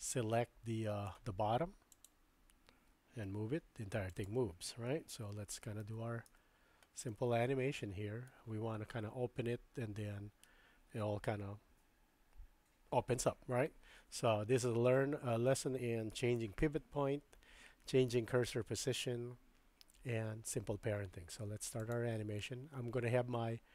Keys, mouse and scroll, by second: 2.0 click, 3.3 g, 5.2 super+z, 5.6 super+z, 5.9 super+z, 6.3 super+z, 7.0-8.3 middle drag, 14.9-16.6 drag, 21.9 click.